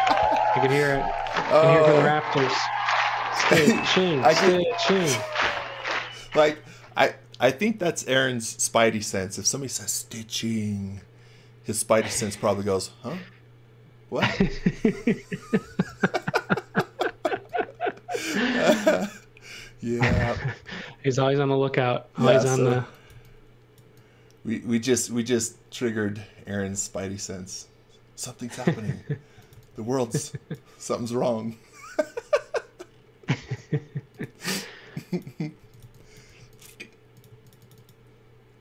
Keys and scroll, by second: 3.7 x, 15.7 x, 17.3 x, 22.2 x, 22.8 x, 23.1 v, 29.0-30.9 typing, 35.3-37.3 typing, 38.5 g.